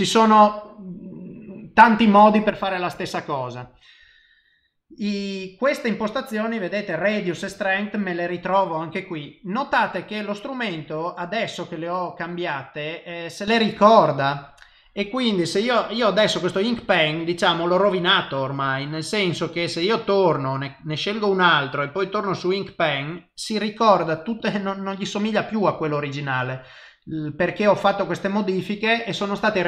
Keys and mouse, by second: 9.9 click, 13.0 click, 13.7 click, 17.8 click, 20.0 click, 21.9 click, 24.0 click, 24.4 click.